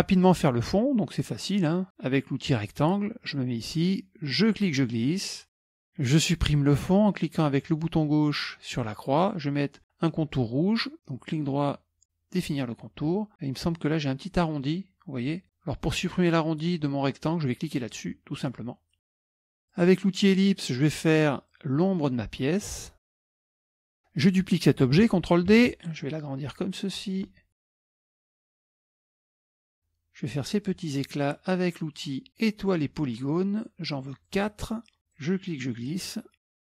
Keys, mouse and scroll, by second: 2.6 click, 4.4-5.8 drag, 8.7 click, 11.3 right click, 12.5 click, 14.6 click, 17.8 click, 19.7 click, 20.2-20.7 scroll up 1, 21.5-23.2 drag, 23.3 click, 23.4 click, 23.6 click, 23.9 shift+click, 25.6 ctrl+d, 26.0-27.5 drag, 27.6 shift+click, 28.0 click, 28.3 shift+click, 28.7 click, 28.9 scroll up 1, 32.4 click, 34.3 click, 35.2-36.7 drag.